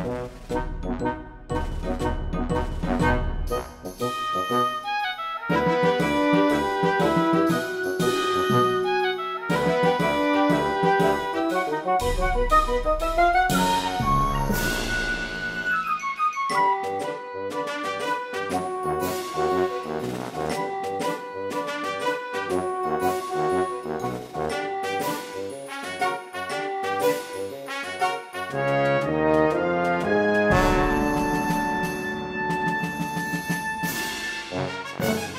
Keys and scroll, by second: 0.2 Tab, 1.4 1, 2.4 Tab, 3.9 3, 5.3 0, 14.2 space, 30.2 Return.